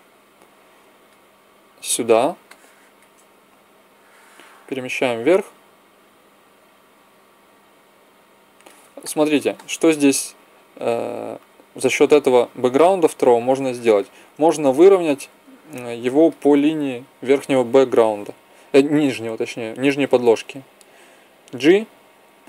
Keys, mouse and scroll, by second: 3.8-5.0 drag, 9.7 middle click, 11.9 z, 15.7-17.2 middle drag, 21.5 g.